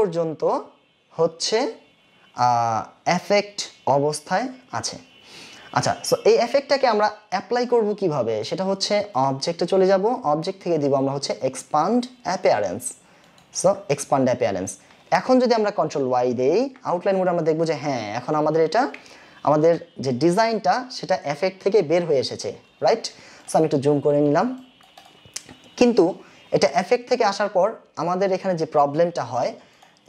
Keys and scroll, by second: 16.4 ctrl+y, 23.1 ctrl+space.